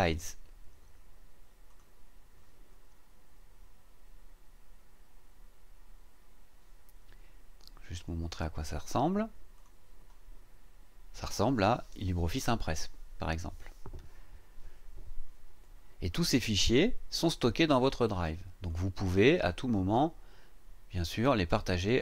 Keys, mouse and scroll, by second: 1.7 click, 9.5 click, 17.7 click, 18.7 click.